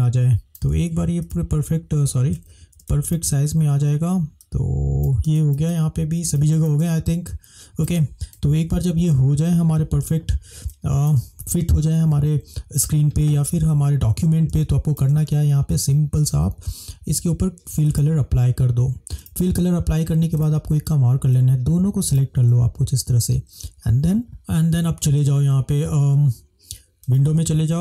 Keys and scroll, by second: 5.8 space, 8.6 -, 8.9 -, 9.2 -, 11.3 space, 14.8 space.